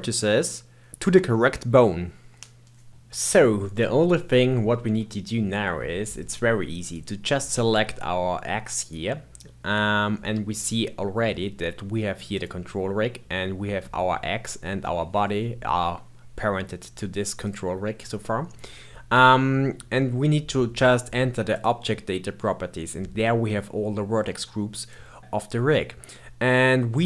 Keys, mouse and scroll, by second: 3.7-6.7 middle drag, 6.7 click, 12.3 click, 17.3 click, 21.5 click, 24.8-26.9 drag.